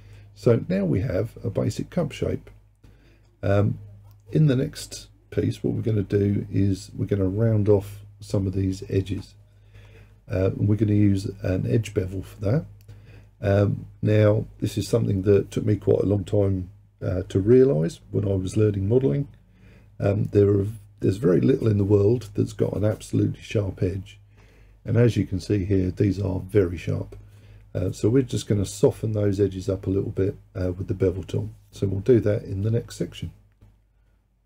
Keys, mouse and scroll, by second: 0.2-3.3 middle drag.